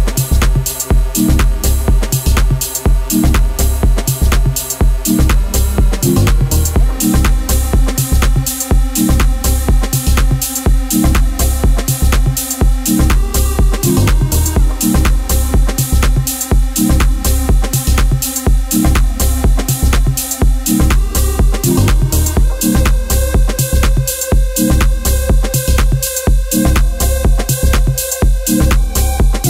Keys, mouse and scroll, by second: 0.0 click, 0.4 shift+click, 0.7 Tab, 0.9 a, 1.8 u, 3.0 scroll up 1, 3.0-3.4 scroll down 8, 3.4-7.4 typing, 4.3-4.8 scroll up 9, 5.7 scroll up 3, 6.3 middle click, 8.1 ctrl+s, 8.3 scroll down 3, 8.5 Tab, 8.7-9.8 middle drag, 9.8 o, 12.1 o, 13.4 o, 14.1-14.7 middle drag, 14.7 o, 16.8 o, 29.0 ctrl+s.